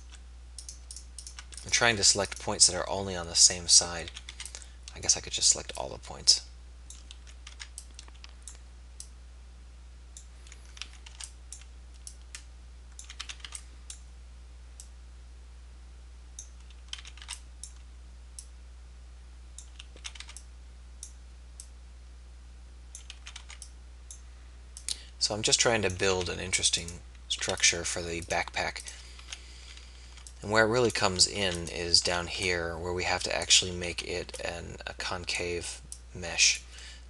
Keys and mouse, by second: 4.2 a, 4.4 b, 7.4 a, 7.6 b, 10.9 a, 11.3 b, 13.3 a, 13.6 b, 17.0 a, 17.2 b, 20.1 a, 20.3 b, 23.3 a, 23.3 b, 26.4 a, 26.8 click, 27.5 a, 29.1 a, 30.1 b, 31.5 a, 32.1 a, 32.3 b, 34.0 a, 34.2 b.